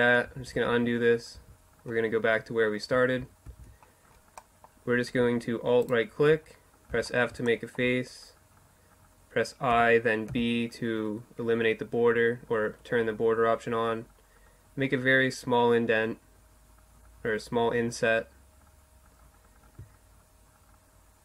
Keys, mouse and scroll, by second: 0.4 ctrl+z, 2.5 ctrl+z, 3.1-4.9 middle drag, 6.0 f, 6.5-9.1 middle drag, 8.8 i.